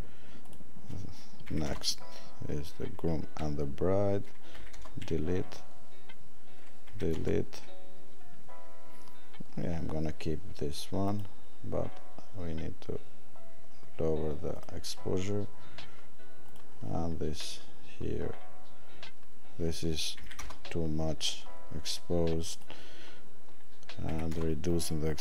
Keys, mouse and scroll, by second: 14.5 click, 24.1 click.